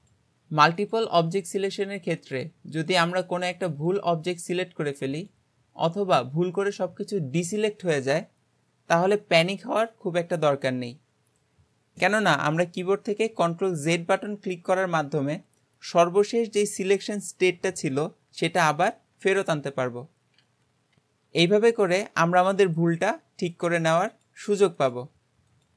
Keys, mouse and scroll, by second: 0.0 click, 0.8 click, 1.6 shift+click, 2.2 shift+click, 2.9 shift+click, 3.7 shift+click, 4.5 shift+click, 5.2 shift+click, 7.5 click, 13.9 ctrl+z, 19.7 ctrl+z, 20.4 ctrl+z, 22.8 shift+click, 23.6 shift+click, 24.2 shift+click, 24.8 shift+click, 25.6 shift+click.